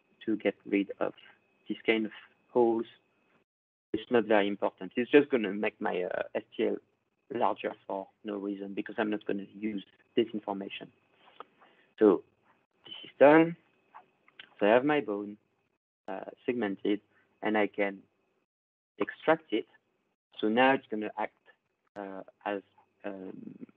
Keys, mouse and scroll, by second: 2.7 click, 13.6 click, 14.4-14.7 ctrl+scroll, 15.4 click, 17.6 right click, 19.1 click, 19.3 ctrl+scroll up 8, 20.8 right click, 23.4 middle click.